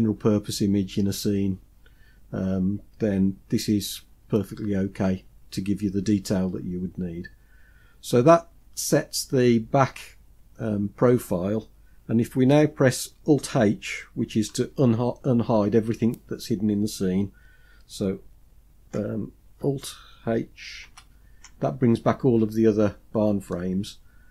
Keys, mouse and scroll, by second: 20.2 alt+h, 22.4-23.0 scroll down 3, 22.9-24.3 middle drag.